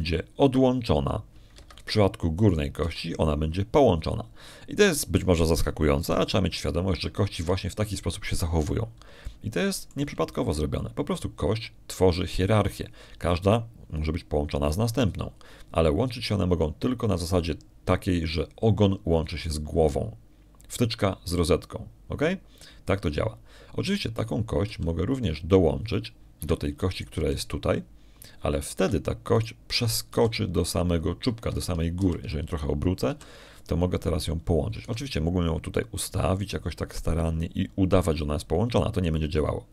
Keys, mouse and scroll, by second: 1.2 right click, 1.6 g, 3.4 Escape, 4.4 right click, 4.7 g, 9.2 Escape, 11.1 shift+click, 26.0 right click, 26.5 g, 28.2 Escape, 28.8 right click, 29.0 g, 30.6 Escape, 31.2 right click, 32.0 g, 33.4 Escape, 33.8 r, 34.4 click, 35.0 g, 35.4 click, 36.7 g.